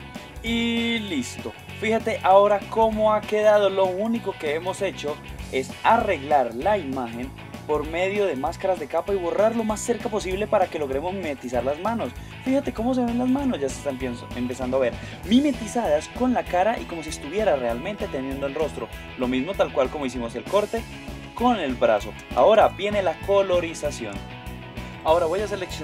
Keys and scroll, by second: 0.2 super+-, 2.4 super+Tab, 22.6 super+0.